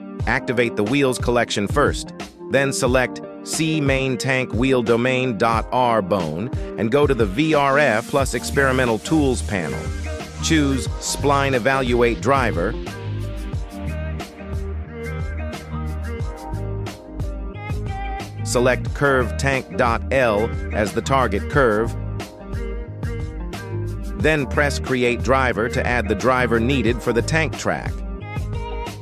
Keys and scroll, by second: 4.5 g, 5.3 Escape, 27.4 g, 27.6 y.